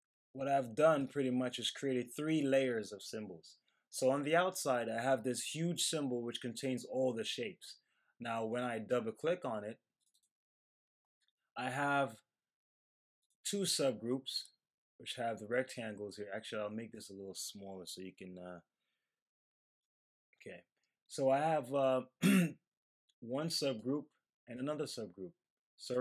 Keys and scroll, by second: 19.8 super+-.